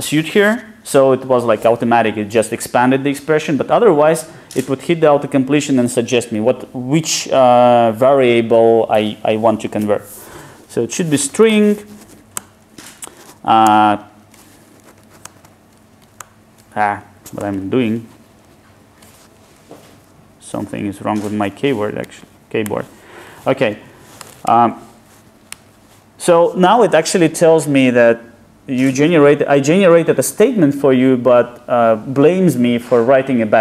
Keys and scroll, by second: 12.4 Return, 13.6 alt+super+Return.